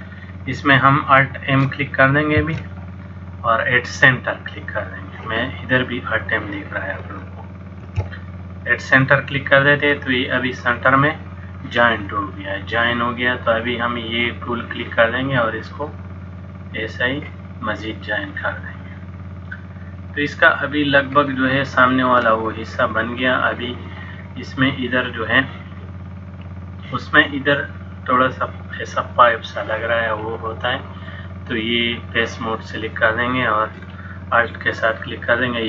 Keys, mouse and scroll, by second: 2.4 alt+m, 7.9 alt+m, 10.1 middle click, 13.5 click, 15.7 click, 20.3 middle click, 21.4 shift+middle click, 22.6 middle click, 31.1 click, 34.6 alt+click.